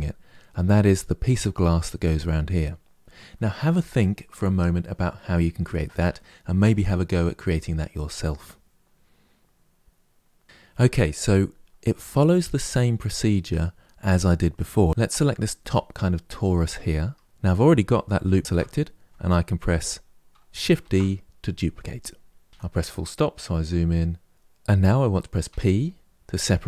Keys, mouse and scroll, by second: 11.7-14.7 scroll up 2, 14.7 click, 16.3 Tab, 18.2 alt+click, 20.5 shift+d, 22.5 KP_Decimal, 22.5-24.3 middle drag, 25.2 p.